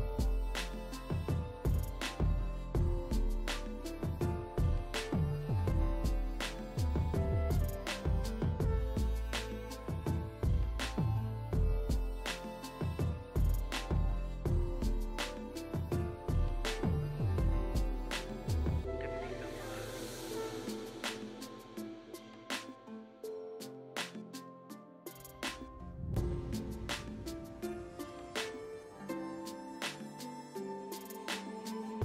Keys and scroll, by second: 6.4 space, 7.3 ], 9.7 space, 18.2 space, 27.3 space, 29.2 space, 30.1 space, 31.6 space.